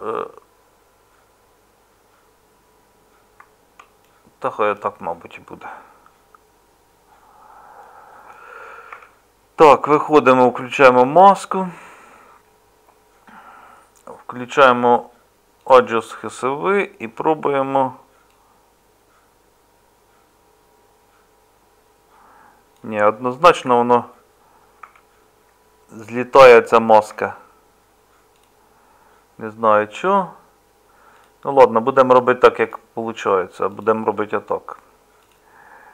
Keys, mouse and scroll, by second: 8.9 Tab, 23.5 ctrl+z, 24.8 Tab.